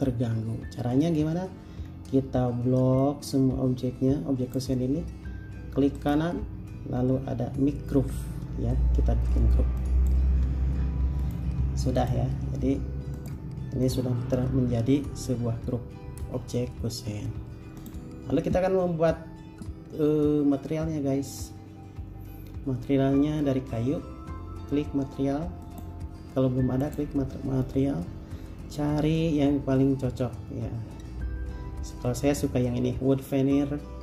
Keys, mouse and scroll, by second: 2.1-2.7 scroll down 1, 6.2 right click.